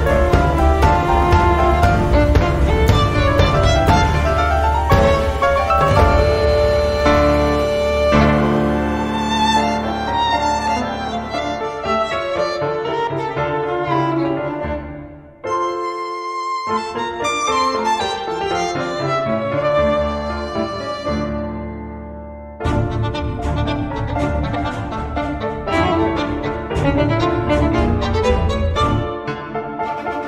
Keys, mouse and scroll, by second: 1.5 click, 4.1 click, 5.5-6.7 scroll down 3, 7.4 click, 8.5-9.7 drag, 10.6 click, 12.8 0, 16.3 click, 19.7 click, 21.8-24.0 typing, 25.6 5, 27.8 click, 29.5-30.1 scroll up 1.